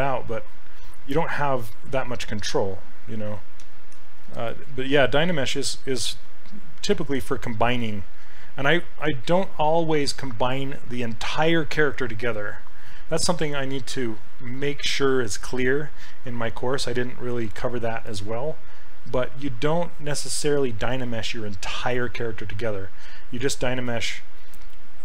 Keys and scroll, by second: 3.3 ctrl+z, 3.7 ctrl+z, 4.0 ctrl+z.